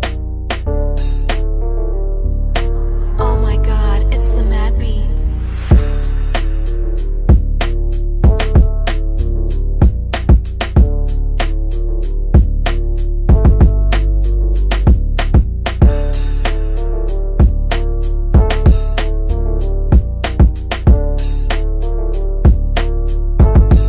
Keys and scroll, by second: 6.0 shift+Page_Down, 9.8 shift+F2, 10.3 Escape, 12.3 g.